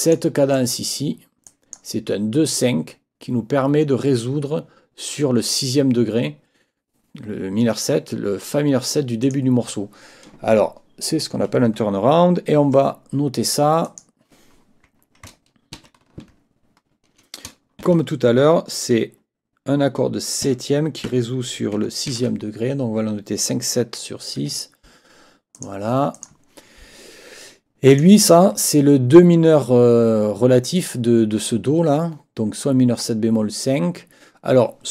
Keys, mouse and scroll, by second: 0.5 click, 1.5 click, 9.2 click, 13.8 click, 15.8 ctrl+t, 17.8 shift+v, 21.8 shift+v, 22.1 shift+i, 24.4 Escape, 25.6 click, 26.1 click, 27.9 click.